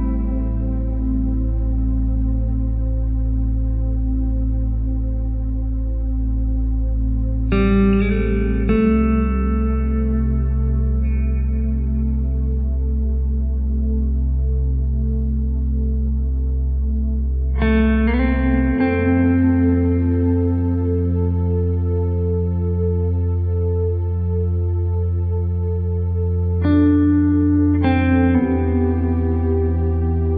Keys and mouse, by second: 0.5 right click, 0.7 shift+right click, 1.1 KP_3, 1.8 e, 2.8 w, 4.8 KP_1, 5.5 s, 6.7 g, 7.3 r, 8.4 r, 9.4 g, 10.2 s, 11.0 g, 11.7 alt+z, 12.5 right click, 13.3 alt+z, 13.4 right click, 13.9 right click, 14.5 g, 17.6 r, 21.5 right click, 21.8 g, 23.1 right click, 23.3 g, 25.5 right click, 27.6 g, 28.4-29.5 middle drag.